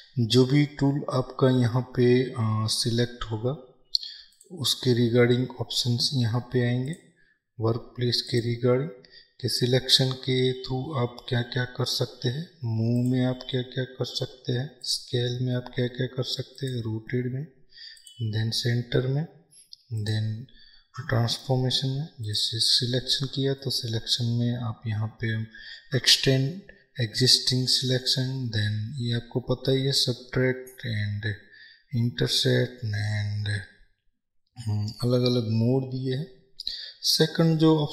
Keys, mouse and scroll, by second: 3.2 t, 4.4-37.9 drag.